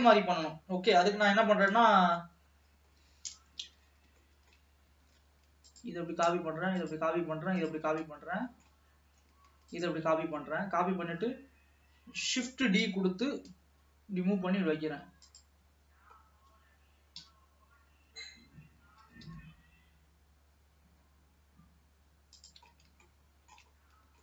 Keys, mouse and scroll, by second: 0.0 KP_3, 3.0-3.6 scroll up 1, 3.9 ctrl+s, 4.4 shift+middle click, 5.3 ctrl+s, 5.8 click, 6.2-6.9 scroll down 2, 6.9 shift+click, 7.8 shift+click, 8.2 middle click, 9.1-9.9 scroll up 1, 9.9 shift+click, 10.7-12.5 scroll down 1, 12.5 shift+d, 15.9-16.3 scroll up 1, 16.3-17.2 scroll down 1, 17.2 KP_3, 18.1-19.0 scroll up 1, 19.0 g, 22.9-23.2 scroll up 3, 23.2 shift+middle click, 23.9-24.2 scroll down 3.